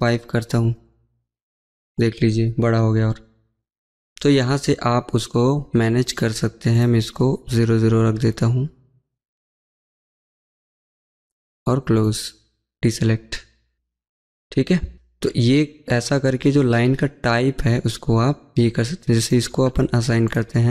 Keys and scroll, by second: 14.8 Escape.